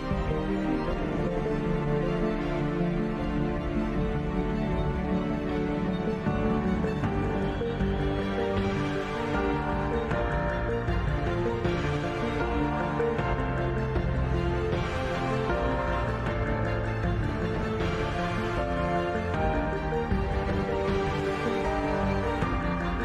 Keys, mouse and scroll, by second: 0.3 middle click, 0.6 Tab, 1.2 f, 1.6 click, 2.1 e, 2.2 click, 5.6 ctrl+b, 7.6 i, 9.2 e, 9.4 ctrl+z, 9.5 s, 10.9 e, 12.0 i, 13.0 g, 14.1 middle click, 14.3 e, 15.4 g, 16.3 i, 17.0 g, 19.0 s, 21.2 middle click, 21.8 ctrl+r, 22.8 ctrl+z.